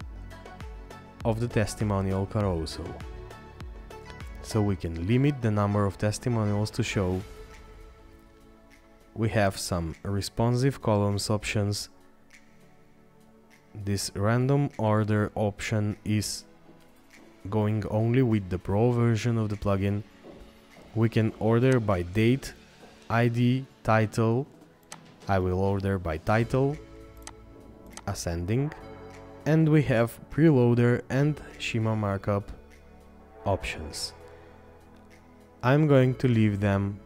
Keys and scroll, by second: 27.0 scroll down 1.